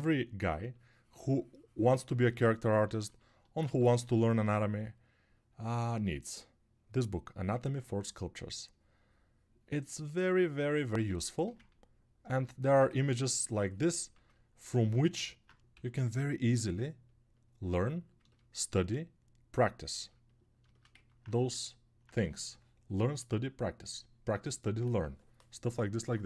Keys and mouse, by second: 3.9 ctrl+1.